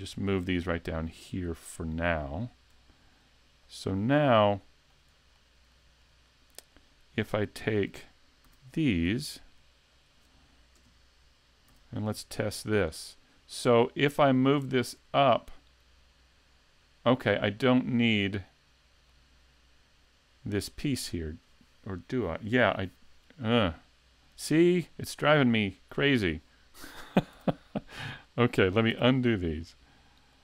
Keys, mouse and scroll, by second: 3.7 shift+click, 4.1 middle click, 5.4 shift+middle click, 6.0 middle click, 7.6 click, 8.5 a, 9.9 shift+click, 10.8 KP_3, 11.7 z, 12.0-12.6 scroll down 3, 12.4 shift+middle click, 12.9-13.2 scroll up 2, 17.6 middle click, 25.0 click, 27.4 a, 28.3 click, 28.9 a, 30.3 click.